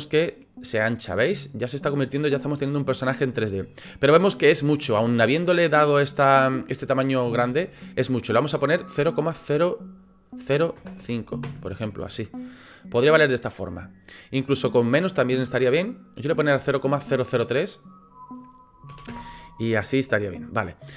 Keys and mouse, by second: 0.3-3.2 middle drag, 4.4 middle click, 8.8-12.0 middle drag, 12.7-15.5 middle drag, 16.6-20.9 middle drag.